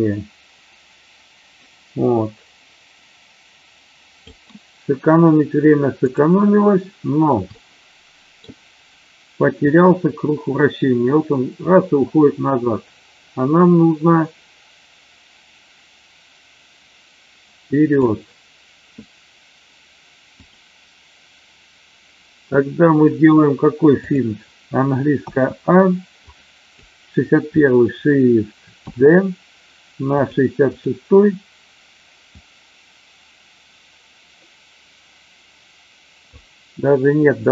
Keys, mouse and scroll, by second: 6.1 click, 7.6-8.4 ctrl+middle drag, 9.7-18.2 drag, 24.0 click, 25.2 a, 26.2-26.8 drag, 28.8 ctrl+shift+d, 30.7 click, 32.3-36.3 drag.